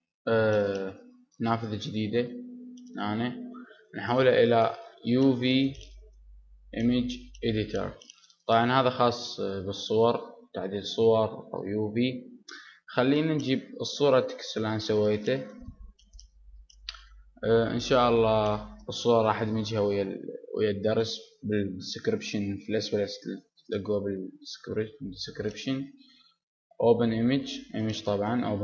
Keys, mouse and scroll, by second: 2.7 t, 4.7 click, 7.3 click, 8.0-26.2 drag, 27.7 click, 28.4 click.